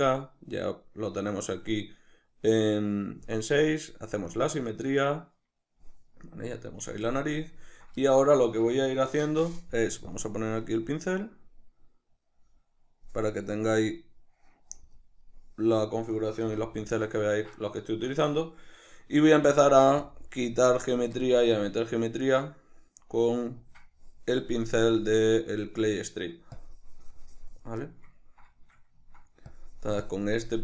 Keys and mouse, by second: 6.2-10.1 middle drag, 10.1 click, 11.3 click, 12.2-16.9 drag, 16.5 c, 16.9-19.6 shift+middle drag, 19.1 f, 19.6 click, 19.8 f, 20.2 click, 21.7-23.6 ctrl+middle drag, 23.6-27.9 drag, 27.9-29.5 ctrl+middle drag, 29.5-30.6 drag.